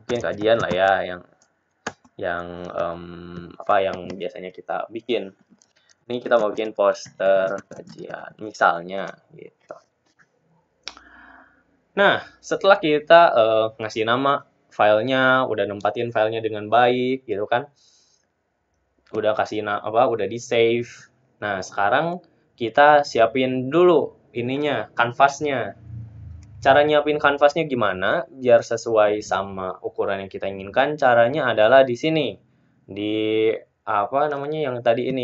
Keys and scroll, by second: 8.0 Return, 8.0 typing, 15.8-16.5 typing.